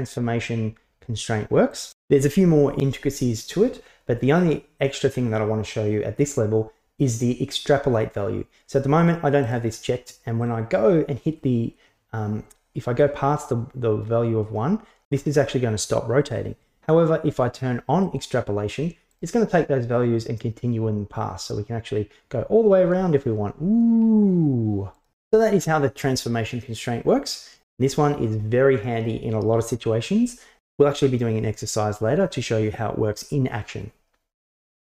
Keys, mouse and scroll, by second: 9.5 click, 10.5-13.0 drag, 15.1 click, 18.1 click, 19.1 click, 20.0-25.2 drag, 27.3 drag.